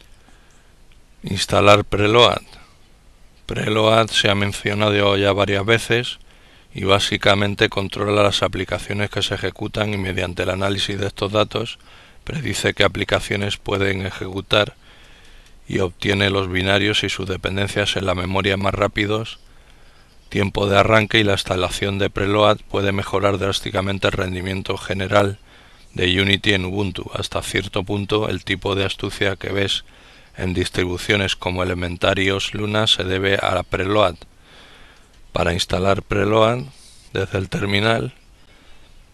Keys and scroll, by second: 36.8 ctrl+alt+t.